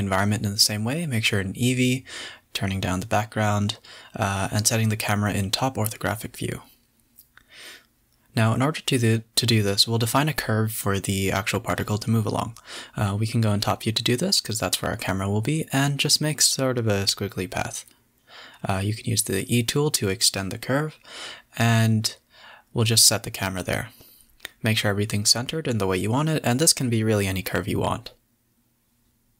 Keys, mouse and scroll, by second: 1.0 click, 2.0 z, 3.1 click, 3.3 x, 4.5 click, 5.0 click, 6.4 shift+a, 11.7-12.5 middle drag, 12.5 KP_7, 12.9 Tab, 13.4 click, 14.0-16.8 typing, 18.1 e, 20.3 click, 20.5 click, 21.3 g, 21.4 Tab, 21.5 scroll down 1, 22.1 KP_7, 22.5 ctrl+alt+KP_0, 23.1 click, 23.2 g, 24.0 g, 24.6 click, 24.7 Tab, 25.0 Tab, 25.4 Tab, 25.6 click, 25.8 g, 26.7 click, 26.8 g, 27.3 s, 27.9 r, 28.9 click, 29.0 g.